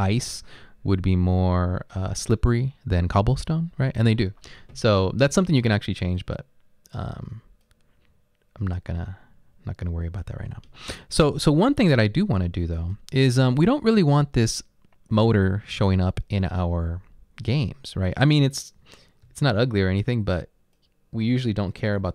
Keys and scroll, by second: 19.3-21.5 typing.